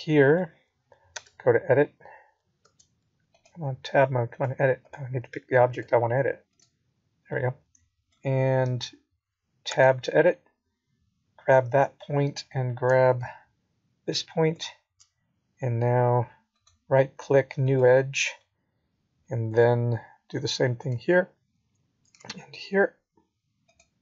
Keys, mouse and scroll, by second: 2.2 middle click, 5.0 scroll down 3, 5.5 middle click, 6.8-7.7 scroll down 1, 7.7 Tab, 7.7-8.1 scroll down 2, 8.1 click, 9.5 h, 10.1 middle click, 10.9 scroll up 2, 13.7 KP_3, 14.9 KP_1, 16.2 KP_1, 16.9 middle click, 19.6 Tab, 21.1 Tab, 21.8 click, 22.8 click, 23.3 click.